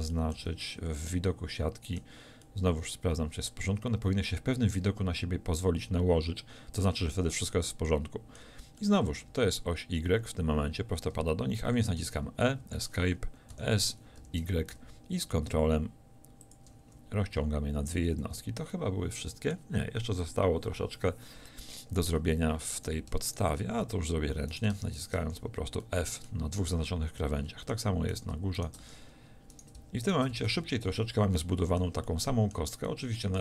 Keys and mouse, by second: 0.4 z, 12.0 e, 13.6 s, 16.6 click, 18.0 a, 18.3 z, 23.8 f, 25.3 f, 26.6 middle click, 30.4 f, 30.5 a.